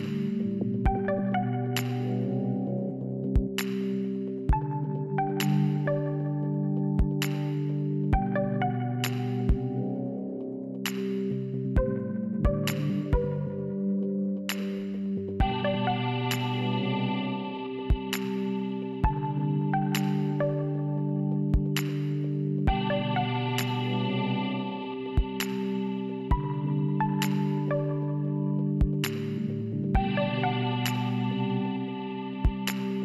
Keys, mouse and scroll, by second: 1.6 click, 10.0 click, 17.5 click, 27.6 click, 29.3 click.